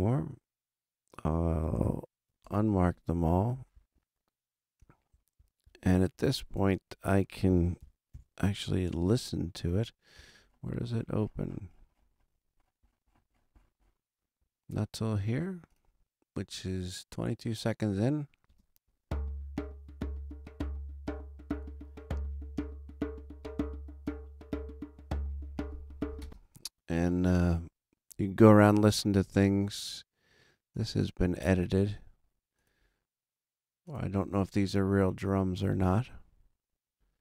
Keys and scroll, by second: 8.1 super+=, 18.4 space, 26.2 space.